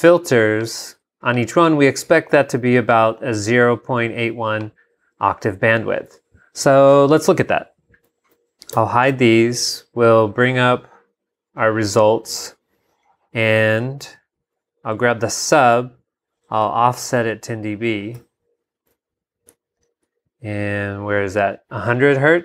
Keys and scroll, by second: 6.1 super+Tab, 8.7 shift+super+h, 16.6 super+Up.